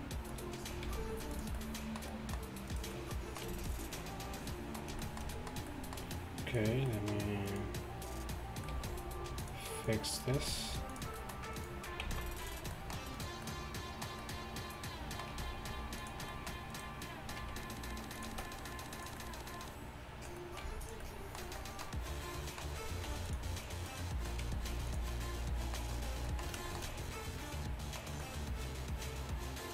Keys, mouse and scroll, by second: 0.4 g, 0.9 g, 3.1 g, 3.5 g, 10.4 g, 12.1 x, 15.6 g, 17.5 r, 18.2 g, 18.4 s, 20.5 s, 20.7 g, 23.3 r, 24.5 g.